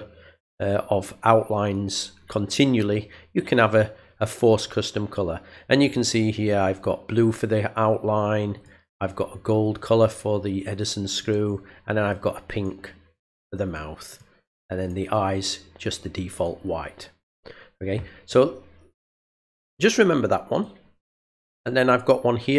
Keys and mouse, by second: 8.5 click, 11.2 click, 12.0 click, 12.5 click, 13.1 click, 13.6 click, 14.1 click, 14.8 click, 16.3 click, 20.5 click.